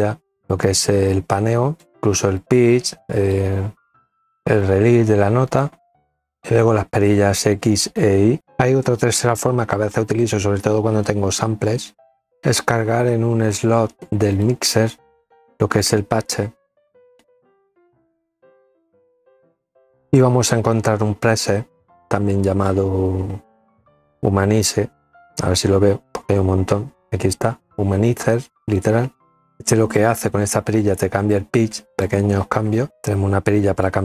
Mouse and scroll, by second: 1.8 click, 3.2 click, 5.5 click, 6.6-7.6 drag, 13.3 click, 16.6 click, 20.3 click, 27.5 click, 29.6-30.8 drag, 32.3-33.3 drag, 33.5-34.0 drag.